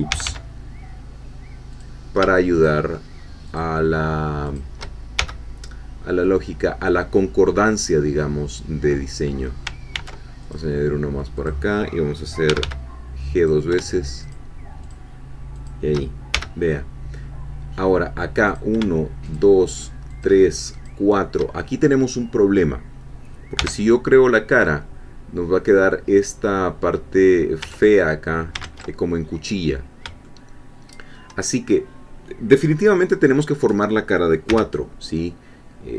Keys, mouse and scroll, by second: 0.1 g, 1.7 click, 2.5 shift+click, 3.5-4.7 shift+drag, 5.2 shift+f, 9.9 ctrl+r, 10.4 ctrl+click, 11.3 click, 12.5 g, 13.4 click, 14.2 shift+click, 14.9 shift+click, 16.3 shift+f, 18.5 click, 19.3 shift+click, 20.3 shift+click, 23.6 f, 28.6 ctrl+z, 29.7-30.0 scroll up 2, 30.3-31.3 shift+middle drag, 34.5 f.